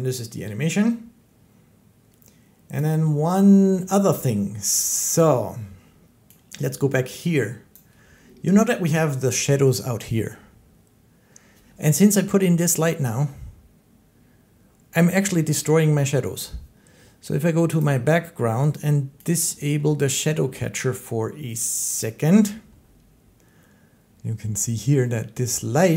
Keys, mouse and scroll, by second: 2.6 click, 4.0 shift+middle click, 5.1 shift+middle click, 7.6 click, 8.5-12.8 drag, 8.5 shift+scroll, 19.1 click, 21.9 click, 23.4 click, 24.1 click, 25.0-25.9 middle drag.